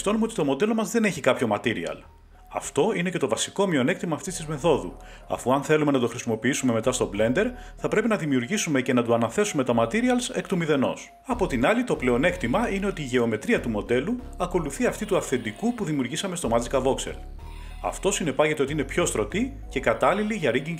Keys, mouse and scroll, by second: 2.6 middle click, 3.9 click, 6.3 click, 7.1 click, 9.2 middle click, 10.3 click, 12.0 Tab, 17.5-20.7 middle drag.